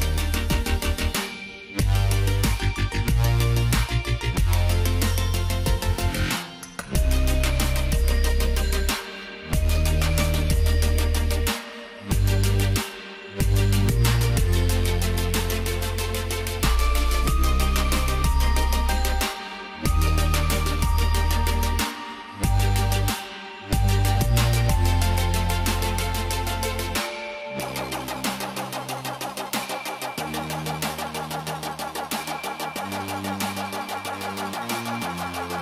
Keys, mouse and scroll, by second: 0.9 shift+click, 2.4 click, 3.6 z, 4.0 click, 5.8 ctrl+g, 7.1 shift+click, 8.1 click, 13.2 shift+click, 15.2 click, 21.6 g, 23.2 click.